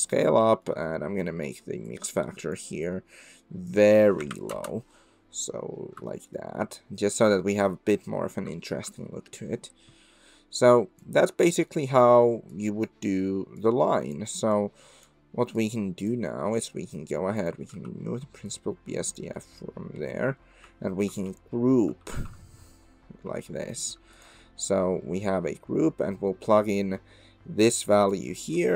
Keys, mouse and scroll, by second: 0.6 middle click, 1.4-5.2 drag, 6.1 shift+middle drag, 8.5 shift+middle drag, 10.7 click, 12.5 click, 13.7 click, 14.5 click, 15.6 click, 17.4 click, 17.7 x, 18.5 click, 21.1 ctrl+g, 22.3 ctrl+g, 26.8-28.1 drag.